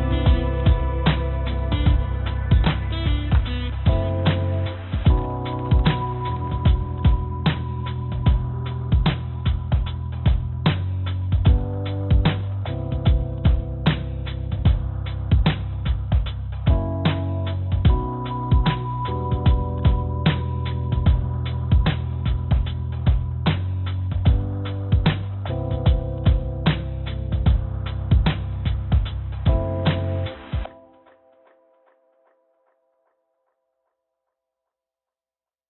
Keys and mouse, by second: 1.2 a, 2.2 a, 2.4 a, 3.8 click, 4.5 click, 4.8 click, 5.0 click, 5.7 click, 7.5 click, 9.0 a, 11.1 shift+click, 11.7 shift+click, 21.2 click, 23.7 l, 24.3 click, 24.7 l, 24.9 click, 25.8 click, 29.0 l, 29.3 l, 31.8 l, 33.5 shift+click, 35.1 shift+d.